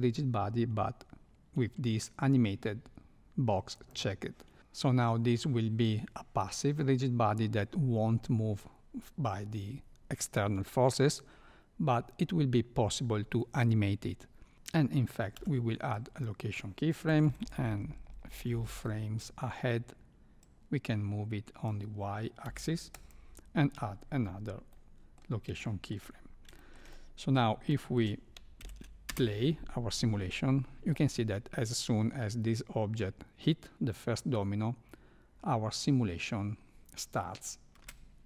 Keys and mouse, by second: 3.7 click, 14.5 ctrl+z, 15.3 i, 17.1 Right, 17.2 Right, 17.4 Right, 17.5 Right, 17.7 Right, 20.4-21.6 drag, 24.7-25.1 middle drag, 25.6 shift+middle click, 26.6 shift+middle click, 26.9 middle click, 27.8 shift+middle click, 28.6 shift+Left, 29.1 space, 37.8 space.